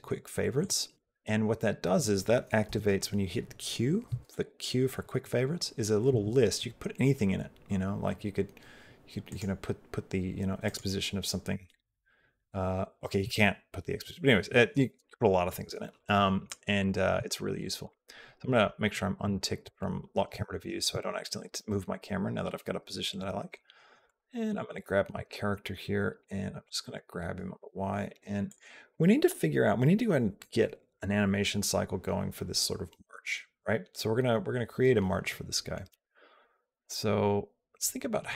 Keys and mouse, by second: 2.5 n, 3.9 q, 5.9 q, 17.0 q, 24.3 click, 26.5 g.